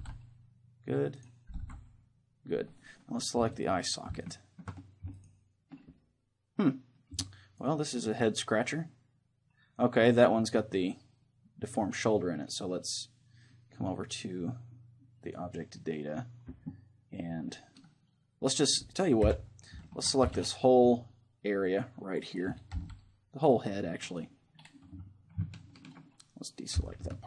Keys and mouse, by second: 0.0 ctrl+l, 1.2-6.6 right drag, 1.6 ctrl+l, 6.6-8.6 middle drag, 8.6 right click, 15.2-17.6 drag, 19.2 KP_3, 20.0 a, 20.3 c, 22.4-26.0 right drag, 22.8 c, 25.6-27.2 middle drag, 26.8 c.